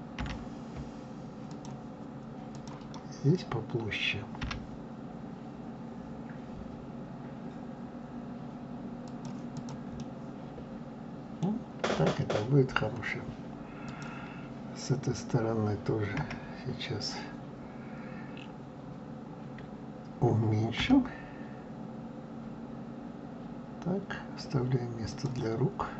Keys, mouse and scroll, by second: 0.2 g, 2.5 click, 4.4 g, 9.5 click, 10.0-13.0 middle drag, 13.9 click, 16.2 KP_1, 20.7 g.